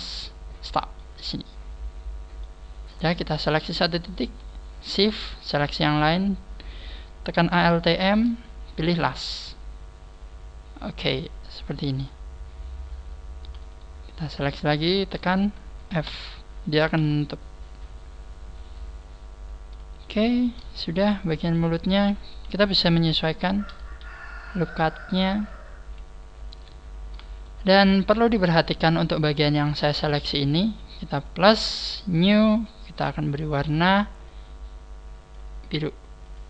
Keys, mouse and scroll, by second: 0.9 click, 0.9 middle click, 2.9 right click, 9.0 alt+m, 9.6-10.4 scroll down 6, 11.1 middle click, 11.1 scroll down 3, 12.3 scroll up 2, 13.7 shift+right click, 14.3 shift+right click, 14.7 shift+right click, 16.1 f, 16.6 scroll down 4, 16.9 KP_1, 17.8 scroll up 2, 18.7 right click, 20.7-21.3 scroll down 4, 21.2 shift+middle click, 22.5 KP_1, 23.0 scroll up 3, 26.1 scroll up 2, 26.6 right click, 26.9 scroll up 2, 27.4 shift+right click, 28.5 shift+right click, 28.9 shift+right click, 29.2 shift+right click, 32.8 click.